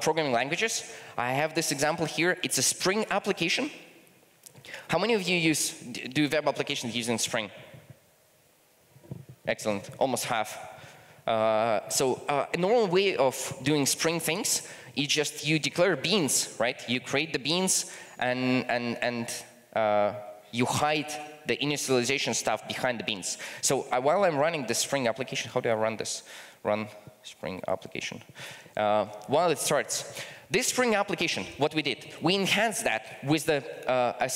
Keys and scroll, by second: 28.1 ctrl+shift+r.